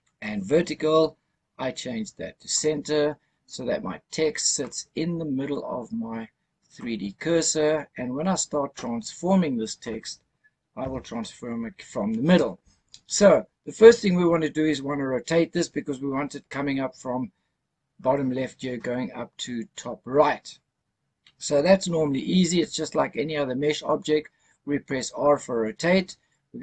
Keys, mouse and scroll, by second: 0.2-2.6 drag, 4.5-5.5 middle drag, 5.7-6.7 scroll up 3, 6.7-9.9 middle drag, 10.7 KP_0, 12.7 scroll up 1, 14.1 scroll down 1.